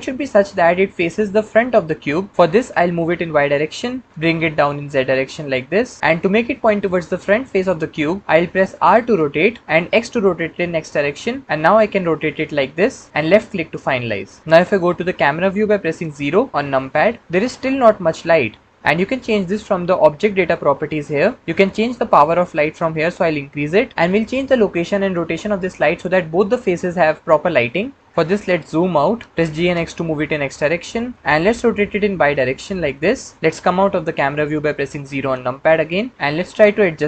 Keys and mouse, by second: 2.8 g, 3.1 y, 4.0 click, 4.1 g, 4.6 z, 8.8 r, 9.8 x, 13.2 click, 16.0 KP_0, 20.8 click, 22.2-23.9 drag, 29.6 g, 29.6 x, 30.9 click, 31.1 y, 31.7 r, 32.1 y, 35.0 KP_0.